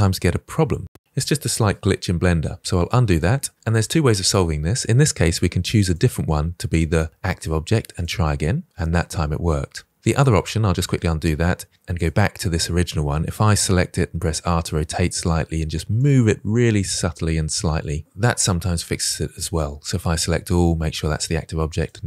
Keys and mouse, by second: 2.4 ctrl+z, 3.0-3.5 middle drag, 8.8-10.0 middle drag, 10.8 ctrl+z, 11.9-12.2 shift+drag, 13.3 r, 13.6 r, 14.7 g, 16.7-17.7 middle drag, 18.0-18.3 drag, 21.9 drag.